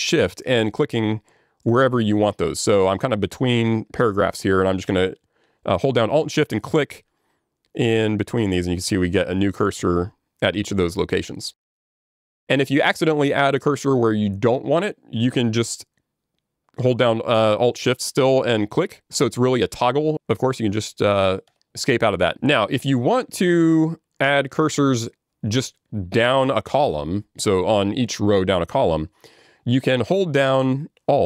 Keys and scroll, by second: 21.5 Escape.